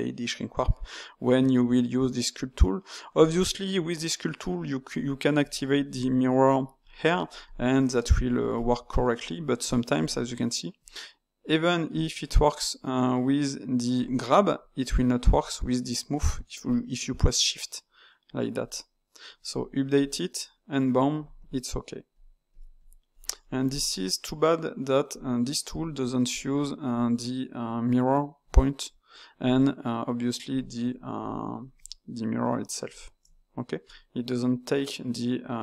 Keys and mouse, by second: 1.4 Tab, 5.4 click, 6.8-11.5 drag, 13.9-19.6 drag, 19.9-23.4 drag, 23.4-25.0 middle drag, 25.0-28.1 drag, 30.4 click, 31.7-34.7 shift+drag.